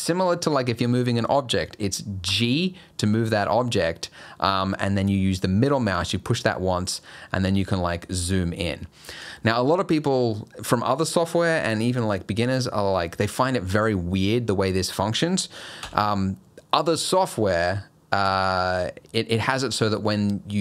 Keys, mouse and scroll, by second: 2.3 g, 15.8 n, 17.2 click, 18.2 click.